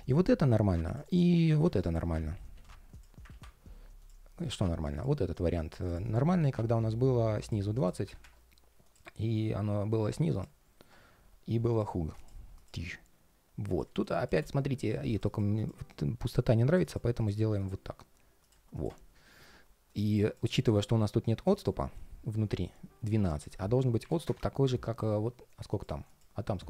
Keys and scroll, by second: 2.3 super+z, 3.0 super+d, 21.6 ctrl+shift+4.